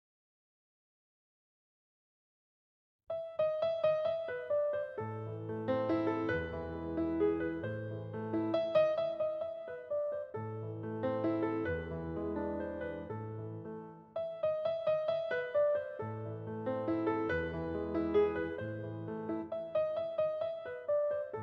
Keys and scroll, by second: 3.0 space, 4.4 space, 6.5 space, 9.4 space.